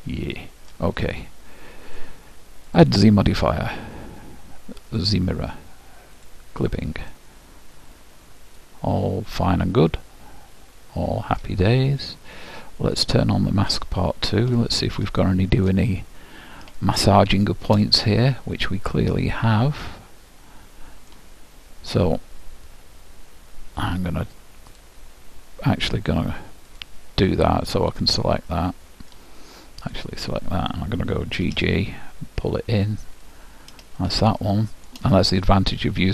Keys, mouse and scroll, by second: 1.9-4.6 drag, 6.2-8.0 drag, 7.1-9.0 middle drag, 12.0-13.7 scroll up 1, 13.7-15.5 drag, 14.6-19.6 middle drag, 24.7-26.5 drag, 26.7-29.7 drag, 28.5-29.7 middle drag, 29.8-31.6 drag, 29.8 middle click, 31.4 g, 34.0-36.1 middle drag.